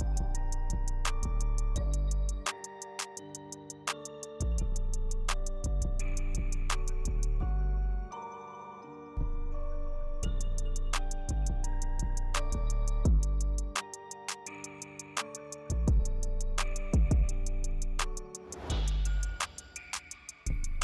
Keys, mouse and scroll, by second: 0.5 shift+click, 0.9 click, 2.1-3.3 drag, 3.9-5.3 drag, 8.2 click, 8.8 shift+middle click, 10.2 click, 11.2 drag, 12.4-13.6 drag, 19.0 click, 20.7 click.